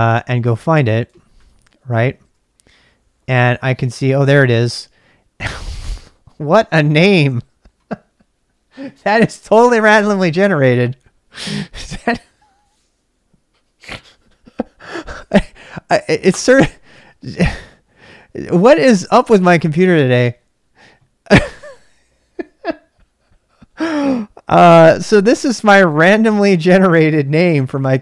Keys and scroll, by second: 2.2 Return.